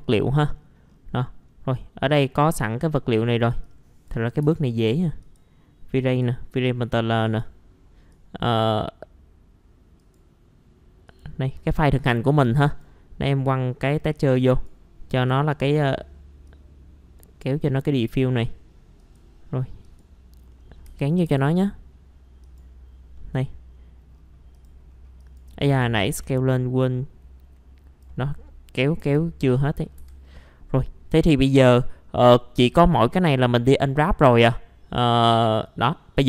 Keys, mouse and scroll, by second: 0.5-0.9 scroll down 1, 1.2 middle click, 1.7-2.7 scroll up 1, 2.8 scroll down 1, 3.6 click, 4.4 Delete, 4.7 right click, 5.2 click, 13.3 scroll up 1, 14.1-20.5 drag, 20.5 middle click, 20.8 F4, 21.0 scroll up 1, 21.2 F4, 22.4 click, 23.2 middle click, 23.7-24.1 scroll up 1, 24.1-24.5 scroll down 1, 24.5 click, 24.9-25.2 scroll up 1, 25.2 click, 26.1 w, 26.5-28.4 drag, 28.4 scroll up 1, 29.0 F4, 29.5-30.0 scroll down 1, 30.0 F4, 30.3 scroll up 1, 30.7 middle click, 32.0-32.6 scroll up 1, 33.1 click, 34.2-35.0 scroll down 1, 35.0 middle click, 35.6 scroll up 1.